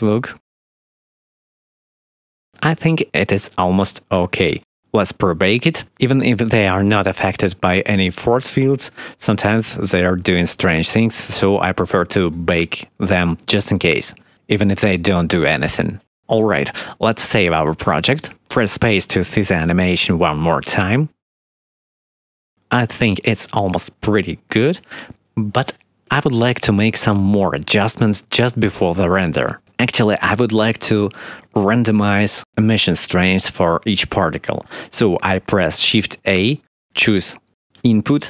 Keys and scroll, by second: 0.7 space, 2.3 space, 3.1 ctrl+s, 8.1 space, 10.6 space, 15.8 ctrl+s, 19.3 ctrl+s, 20.0 space, 24.9 space, 36.6 shift+a.